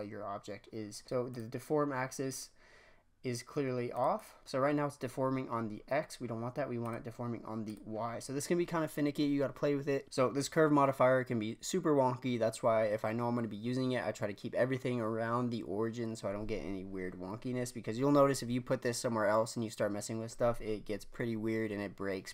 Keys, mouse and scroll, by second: 1.2-4.1 drag, 4.1-5.0 drag, 5.0-6.8 scroll down 3, 6.8-8.1 drag, 8.1-9.4 scroll up 3, 9.4-10.0 scroll up 1, 10.0-12.0 scroll up 1.